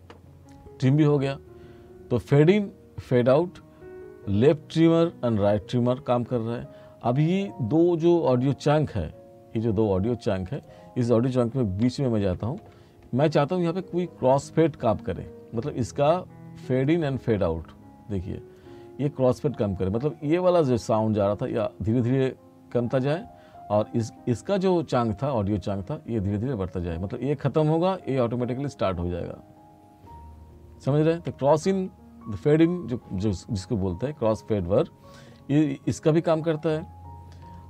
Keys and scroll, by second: 11.9 t, 31.4 r.